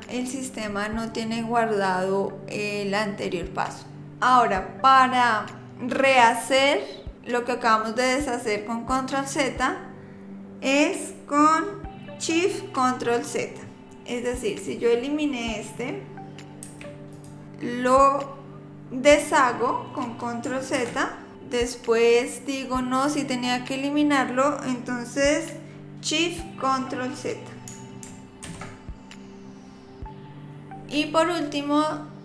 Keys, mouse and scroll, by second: 14.4 click, 16.6 x, 20.7 ctrl+z, 28.4 ctrl+shift+z.